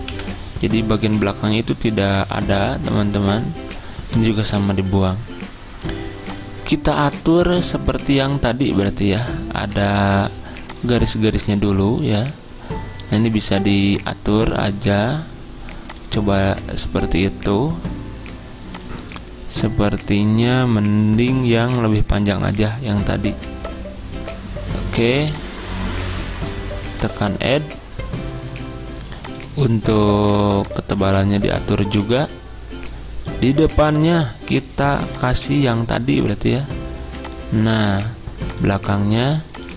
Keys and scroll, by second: 0.2 Delete, 4.6 Delete.